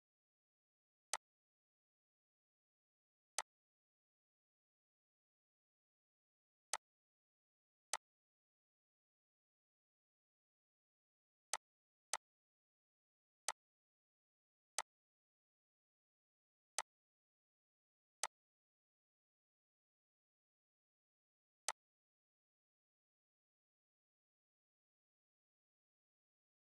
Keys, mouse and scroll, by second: 3.4-4.8 drag, 4.8 right click, 6.7 click, 11.5-16.8 drag, 17.0 right click, 18.2 click, 21.6-26.7 drag.